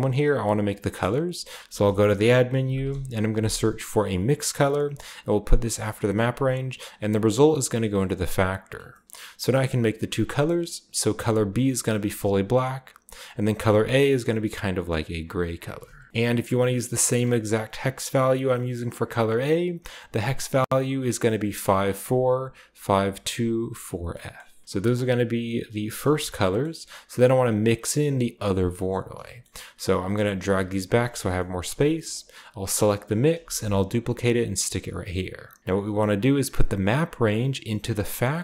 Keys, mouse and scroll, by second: 0.9 middle click, 1.6-3.3 typing, 1.9 shift+click, 4.7 click, 5.6 click, 5.9-7.1 scroll up 1, 7.1-8.0 scroll up 1, 7.6-8.0 drag, 8.3-10.9 drag, 8.9-10.9 middle drag, 9.1-10.9 scroll up 1, 11.0 click, 12.0-13.2 drag, 13.3 click, 15.3 click, 16.1 typing, 16.1 ctrl+v, 19.0-21.8 drag, 23.8-25.9 scroll down 1, 24.0 middle click, 26.2-29.1 scroll down 1, 30.0 drag, 30.4 g, 31.0 click, 31.5 a, 32.0-33.5 drag, 33.3 shift+d, 34.4-35.6 drag, 35.8 scroll up 1, 36.8-38.4 drag.